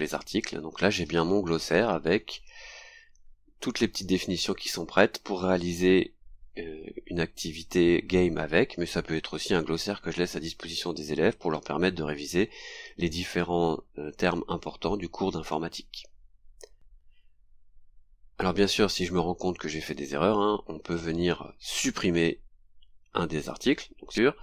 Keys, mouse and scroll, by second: 0.7-1.9 scroll down 4, 4.1-5.5 scroll down 5, 7.6 click, 11.1-11.4 scroll down 2, 15.0-15.3 scroll down 2, 17.4-17.7 scroll up 2, 17.9-18.2 scroll down 2.